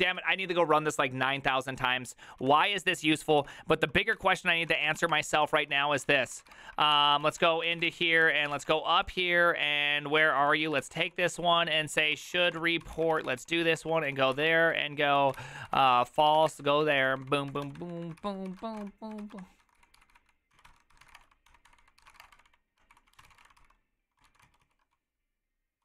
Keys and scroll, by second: 0.0 Return, 0.2 ctrl+u, 0.4 ctrl+u, 2.6 ctrl+a, 2.6 3, 3.4 ctrl+c, 3.5 ctrl+c, 4.1 Up, 4.6 ctrl+a, 4.8-25.8 typing, 4.8 ctrl+c, 5.0 ctrl+:, 5.1 Return, 5.2 ctrl+u, 5.4 ctrl+u, 5.7 ctrl+u, 7.2 ctrl+t, 7.4 ctrl+n, 21.7 ctrl+d.